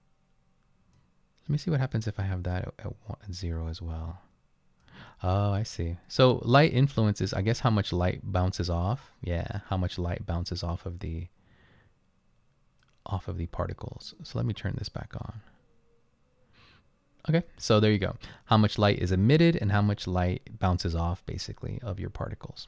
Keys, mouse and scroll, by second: 11.8-12.2 drag.